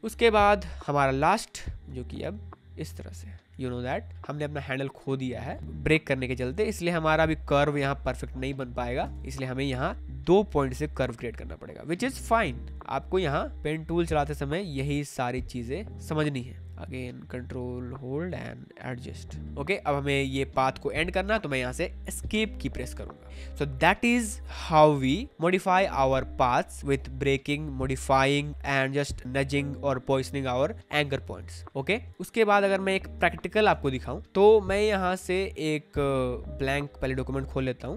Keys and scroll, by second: 9.1 ctrl+z, 20.2 space, 22.2 Escape, 32.0 space, 33.2 space.